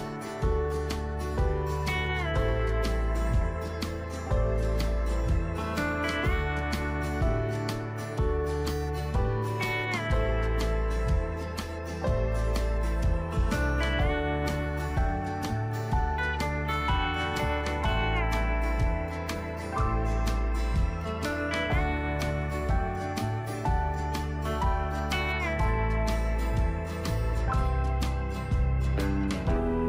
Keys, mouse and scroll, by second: 25.6 ctrl+z, 27.3 click, 29.5 ctrl+g.